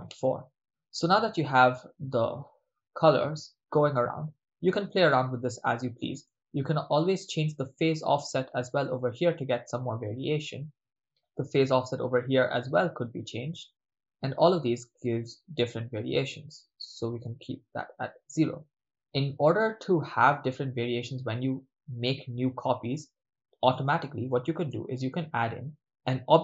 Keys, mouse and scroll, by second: 0.3-0.8 ctrl+middle drag, 1.7-4.0 middle drag, 6.2 middle click, 7.2-10.7 drag, 11.6 middle click, 12.4-16.5 drag, 16.6-18.2 drag, 19.4 click, 20.5 middle click, 22.5 middle click, 24.0 middle click, 24.6 shift+a.